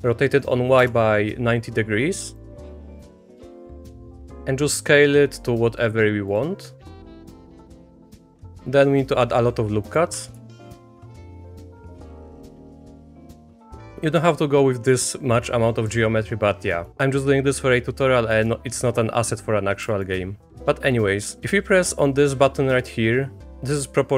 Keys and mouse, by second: 2.3 click, 2.7 s, 3.9 shift+click, 4.0 s, 7.0 click, 7.4 middle click, 7.6 Tab, 7.8 click, 8.0 ctrl+r, 10.6 ctrl+r, 12.5 1, 12.7 click, 13.1 shift+click, 13.4 click, 16.7 middle click, 18.3 middle click, 20.0 shift+middle click.